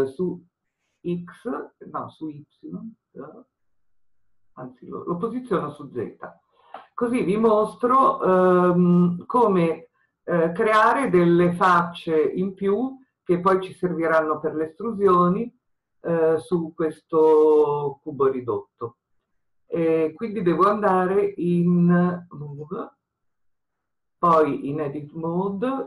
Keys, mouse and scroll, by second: 0.8 click, 5.7 click, 8.9-12.3 scroll up 1, 22.6-25.8 drag.